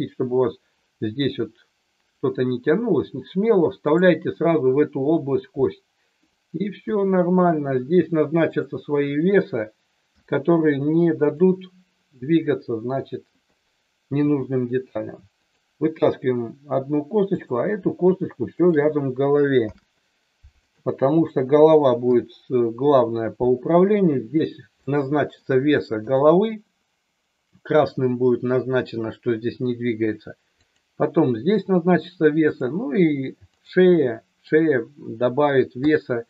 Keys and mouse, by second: 6.7 KP_1, 8.5 click, 10.1 g, 11.2 click, 14.1 e, 15.3 click, 17.3 click, 18.6 shift+click, 19.6 ctrl+p, 22.0 KP_3, 24.8 middle click, 26.0 click, 30.7 click, 32.5 click, 33.5 click, 34.1 middle click.